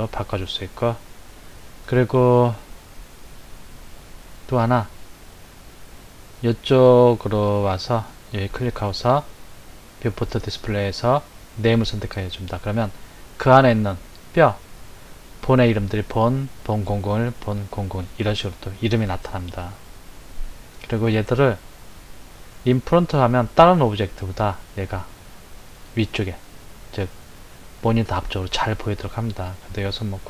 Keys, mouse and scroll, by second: 8.0 click, 10.1-12.1 drag, 23.1 click.